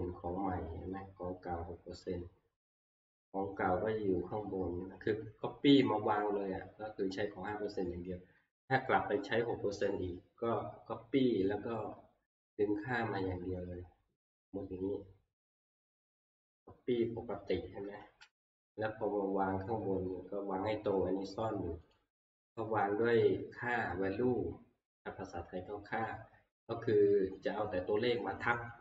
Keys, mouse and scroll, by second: 0.4-4.6 scroll, 10.8 scroll, 11.0 scroll up 2, 11.1 middle click, 12.7 scroll, 17.0 click, 17.0 scroll, 18.3 ctrl+c, 19.0-19.6 scroll, 20.4 scroll, 21.9 click, 22.6 right click, 26.1 click.